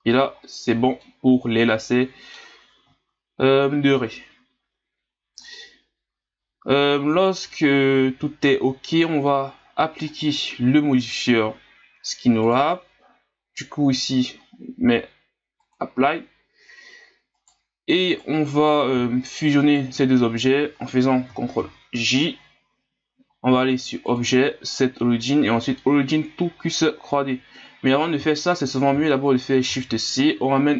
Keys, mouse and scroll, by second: 3.3-4.5 scroll up 4, 5.3-7.1 drag, 7.1 scroll down 5, 7.5-9.5 middle drag, 9.5-9.8 scroll up 2, 10.1 right click, 12.4-15.4 drag, 17.3 right click, 18.1 right click, 19.6 shift+right click, 21.6 ctrl+j, 24.0-27.0 drag, 27.7 scroll down 5, 29.7 shift+c.